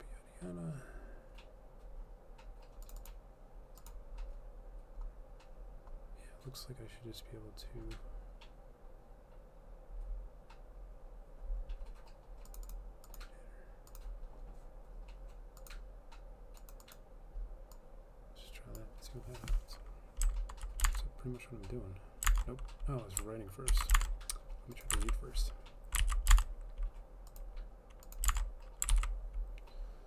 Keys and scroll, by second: 21.0 alt+Tab, 22.4 alt+Tab, 23.8 ctrl+c, 24.1 alt+Tab, 24.1 alt+Tab, 25.0 ctrl+v, 26.1 ctrl+z, 26.4 alt+Tab, 28.4 alt+Tab, 29.0 ctrl+v.